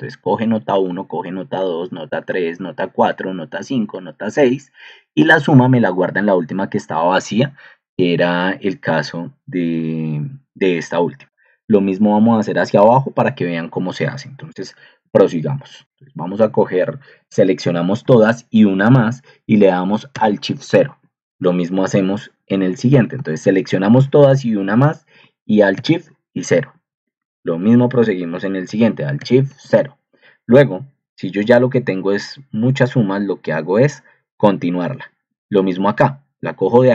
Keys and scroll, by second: 15.0 Escape, 17.2 ctrl+shift+Down, 17.9 shift+Down, 20.1 alt+shift+0, 20.8 Right, 23.2 ctrl+shift+Down, 23.9 shift+Down, 25.7 alt+shift+0, 26.5 Right, 27.3 ctrl+shift+Down, 27.8 shift+Down, 29.2 alt+shift+0.